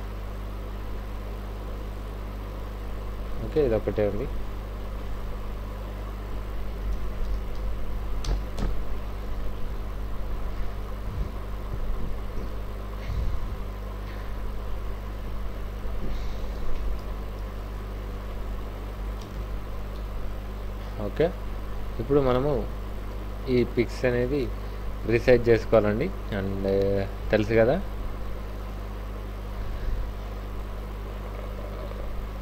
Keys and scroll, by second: 3.6 alt+Tab, 6.6 alt+i, 6.7-8.5 typing, 7.0 Return, 8.2 Return, 16.6 ctrl+a, 16.9 c, 17.0 w, 18.9 w, 19.9 v, 22.6 ctrl+space, 24.3 ctrl+t.